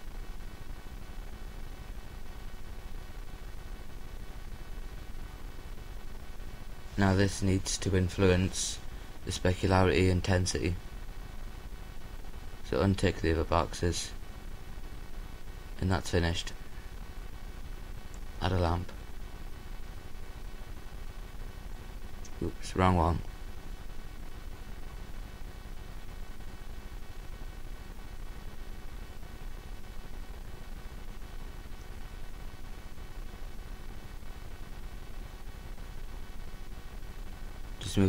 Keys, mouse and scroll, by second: 16.3 click, 16.6-19.0 middle drag, 19.6-20.9 drag, 24.6 Delete, 26.5-28.2 drag, 33.3 alt+g, 34.4-36.4 drag, 37.0 KP_0.